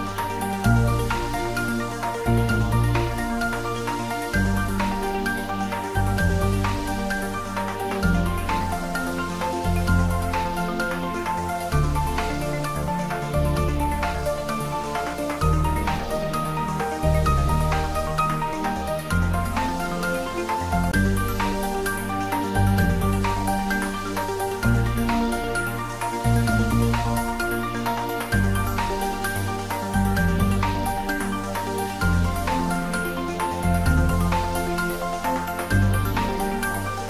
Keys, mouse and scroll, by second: 0.9 click, 1.5-1.9 scroll up 1, 2.7 s, 3.3 y, 5.8 click, 6.5 g, 6.8 y, 8.2 click, 8.5-9.6 typing, 12.7 click, 14.0-15.0 typing, 15.9 Right, 16.3 click, 16.6 scroll down 1, 17.5 scroll up 1, 18.3-19.2 scroll down 1, 19.2-21.3 drag, 21.3-22.2 scroll up 1, 22.6 shift+d, 23.3 y, 25.7 click, 27.2 3, 28.6 g, 28.9 y, 29.9 click, 30.4 scroll down 1, 31.1 Tab, 31.5-32.0 scroll down 1, 32.2 shift+z, 32.5 middle click, 33.6 scroll down 1, 34.3 click, 35.3-36.1 scroll up 1.